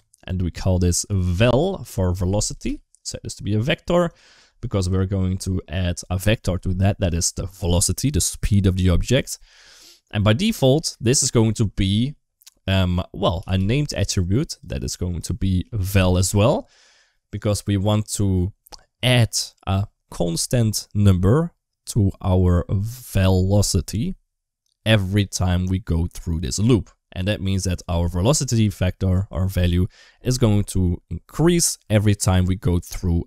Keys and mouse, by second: 0.4-2.3 drag, 2.8-4.0 drag, 4.9 shift+middle click, 9.6 middle click, 10.7-14.5 drag, 15.0-16.0 drag, 17.2 click.